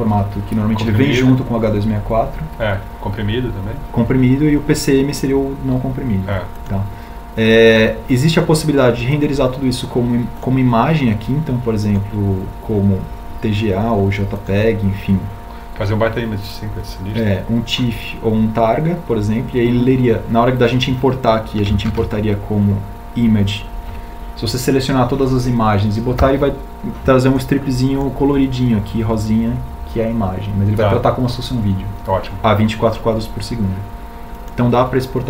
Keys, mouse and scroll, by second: 21.6 shift+a.